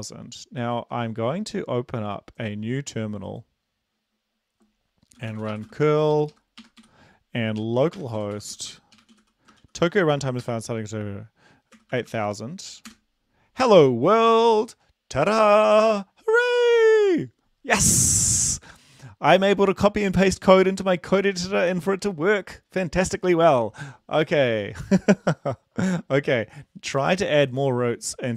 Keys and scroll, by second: 5.2-10.5 typing, 6.3 Left, 6.9 End, 11.8-12.3 typing, 13.1 Return.